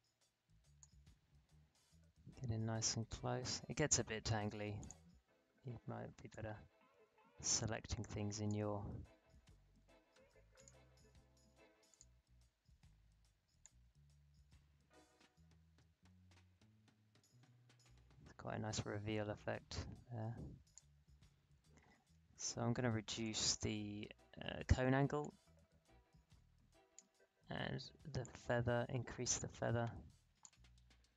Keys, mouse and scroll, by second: 4.8-23.2 drag, 23.4-31.1 drag.